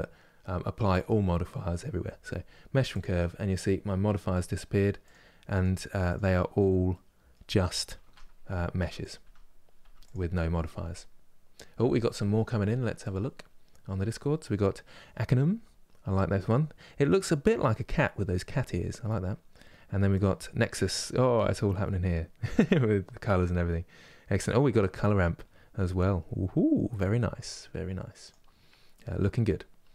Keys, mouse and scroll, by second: 4.8 click, 5.3 click, 6.6-7.7 middle drag, 7.7 Tab, 8.4 Tab, 8.7 click, 9.5 Tab, 9.7-29.9 drag.